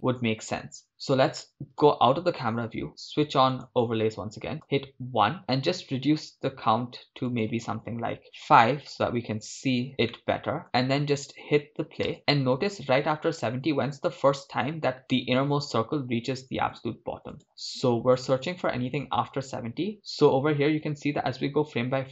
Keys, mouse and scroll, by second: 1.8 KP_0, 3.5 click, 4.6 KP_1, 5.4 scroll down 2, 8.7-9.9 drag, 9.9 scroll up 3, 10.1-10.6 shift+middle drag, 10.6 shift+space, 12.2 shift+space, 12.7-14.5 drag, 16.4 Left, 16.6 Left, 16.7 Left, 16.9 Left, 17.0 Left, 17.2 Left, 17.3 Right, 17.5 Left, 17.7 Left, 17.8 Left, 17.9 Left, 18.8 Left, 19.1-20.0 Right, 21.0 Left, 21.3 Right, 21.9 Right.